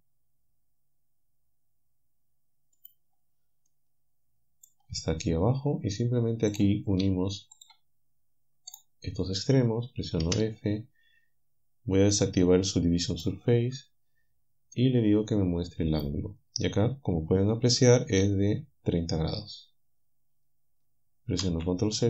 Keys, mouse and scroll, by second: 3.7-4.9 middle drag, 7.6 shift+middle click, 8.8 shift+middle click, 10.2 f, 13.2 click, 14.2-15.9 scroll down 1, 15.9 click, 18.4-19.6 alt+middle drag, 21.4 ctrl+z.